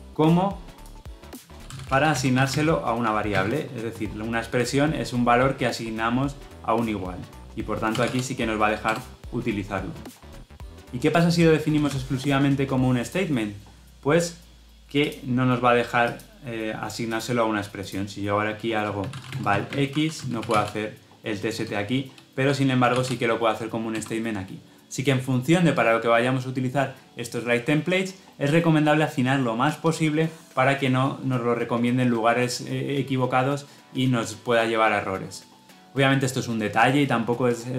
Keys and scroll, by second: 8.7 Return, 23.8 Return.